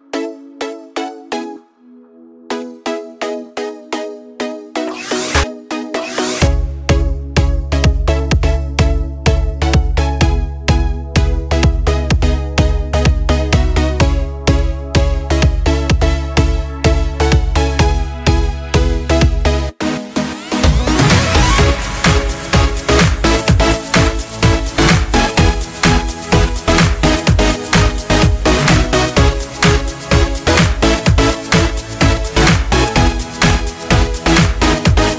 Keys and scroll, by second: 1.5 Return, 1.5 typing, 3.7-4.7 ctrl+space, 4.1-6.6 typing, 7.5-8.0 ctrl+space, 8.5 ctrl+space, 8.5 ctrl+space, 23.3 ctrl+Return, 29.9 alt+BackSpace.